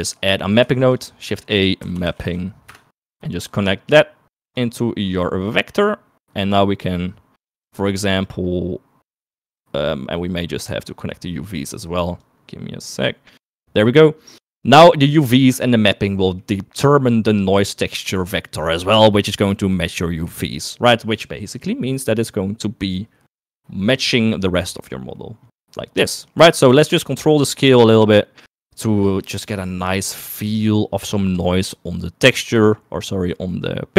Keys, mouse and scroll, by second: 0.2 middle click, 0.9 shift+a, 2.4 p, 4.7 click, 5.3 click, 9.5 middle click, 9.9 middle click, 10.6 middle click, 11.1 middle click, 12.4 click, 13.7 click, 16.4 click, 18.4 click, 26.3 middle click, 27.0-28.9 shift+drag, 29.2 shift+middle click, 30.0 click, 30.8-32.5 drag, 32.9 shift+middle click.